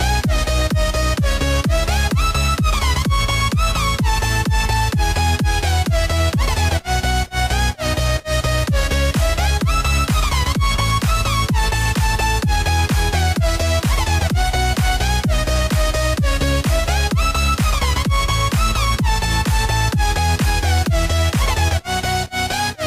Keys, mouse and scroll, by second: 4.5 click, 5.7-6.1 drag, 6.6-9.4 drag, 10.7 click, 13.0 click, 16.2 click, 18.7 s.